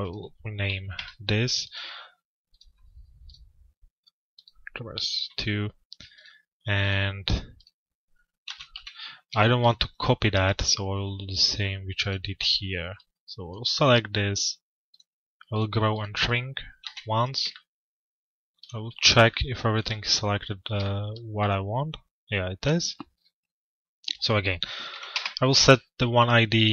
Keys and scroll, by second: 4.0 Return, 8.2 f, 8.7 z, 16.4 p, 24.7 Return.